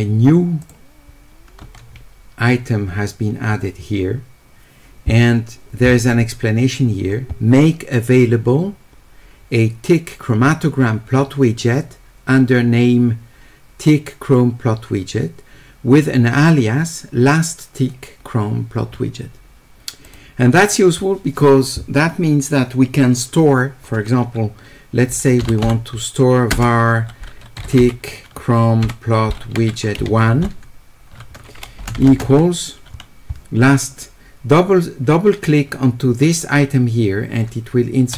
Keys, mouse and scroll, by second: 0.6 click, 20.1 click, 25.2-26.5 typing, 31.8 space.